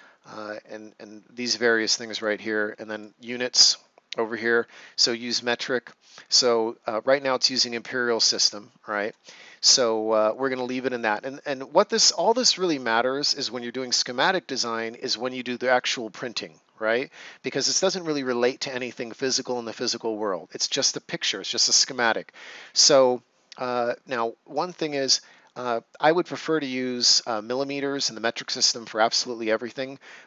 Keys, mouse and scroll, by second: 2.1 click, 24.5 click.